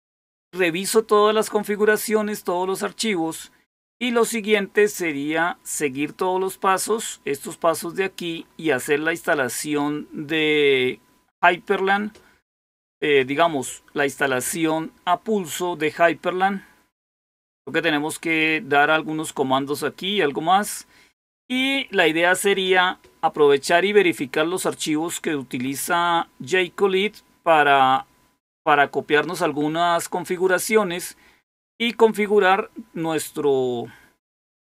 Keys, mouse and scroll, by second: 6.4-8.3 scroll down 2, 8.3-11.4 scroll up 2, 11.4 click, 16.3-16.8 scroll down 1, 16.8-17.6 scroll down 1, 19.3-20.3 scroll down 1, 20.4-21.3 scroll down 1.